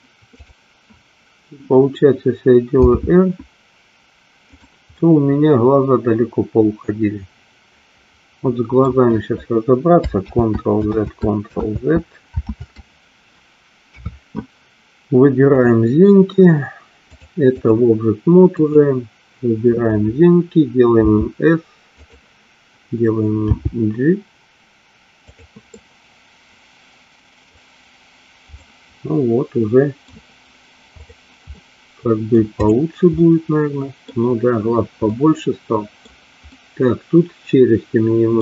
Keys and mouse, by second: 0.5 click, 2.9 r, 5.0-8.9 middle drag, 10.5 ctrl+z, 11.2 ctrl+z, 11.8 ctrl+z, 13.9 KP_3, 15.7 click, 17.3 click, 18.8 click, 21.2 s, 22.0 click, 23.7 g, 25.8-27.4 middle drag, 28.7-30.0 middle drag, 31.7 middle click, 32.7 click, 33.3 middle click, 35.2-36.2 middle drag, 36.6-38.4 middle drag.